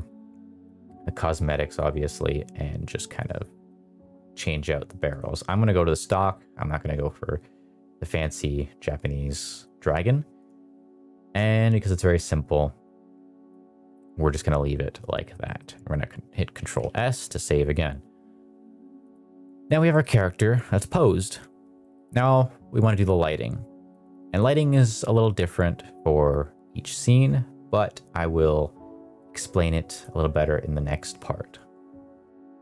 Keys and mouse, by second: 1.7 click, 3.5 click, 5.0 click, 5.3 click, 9.4 click, 12.8 click, 14.2-15.2 middle drag, 15.3 middle click, 16.5 ctrl+s, 18.9 click, 19.8 middle drag, 20.7 middle click, 21.1 middle drag, 21.4 shift+middle click, 21.7 middle click, 24.3 click, 29.3 click.